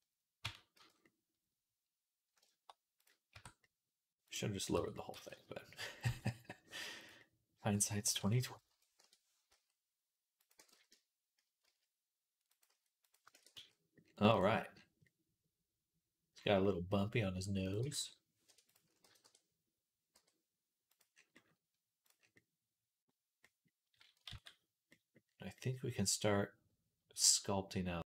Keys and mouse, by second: 0.3 Tab, 0.6-7.0 right drag, 0.6 z, 3.2 Tab, 4.1 click, 4.6 Tab, 4.9 g, 9.3 s, 10.4 g, 12.5 s, 13.1 ctrl+click, 13.2 ctrl+a, 13.5 right click, 13.5 click, 13.7 right click, 13.7 click, 13.9 right click, 14.2 click, 14.5 click, 14.8-22.3 right drag, 17.5-18.6 drag, 17.6 g, 17.8 y, 18.3 Escape, 18.9 g, 21.9 click, 22.4 right click, 22.5-25.4 drag, 24.2 ctrl+s, 26.1-28.1 drag.